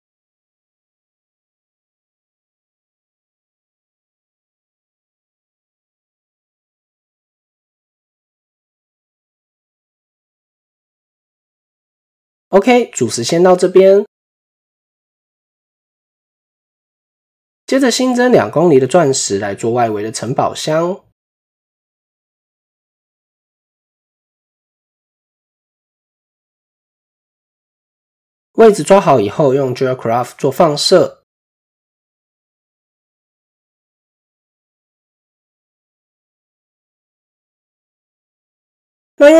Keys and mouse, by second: 0.0 click, 1.4 click, 2.7 click, 3.0 Tab, 4.0 Tab, 4.7 click, 6.0 s, 7.6 Tab, 8.3 middle click, 9.4 click, 10.0-11.8 middle drag, 12.1 KP_1, 13.1 shift+middle click, 14.6 KP_7, 15.6 shift+middle click, 16.7 click, 17.8-20.9 drag, 19.8 typing, 22.2-23.7 drag, 24.1 shift+click, 25.8-27.2 drag, 27.1 typing, 30.1 typing, 30.3-37.4 drag, 38.2 shift+middle click.